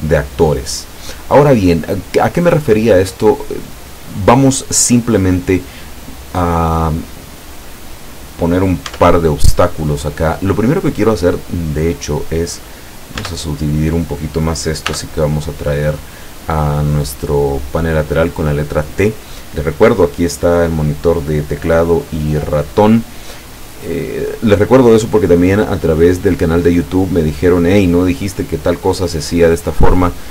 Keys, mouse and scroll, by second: 1.2 click, 1.9 right click, 9.0 Tab, 13.3 Tab, 14.9 t.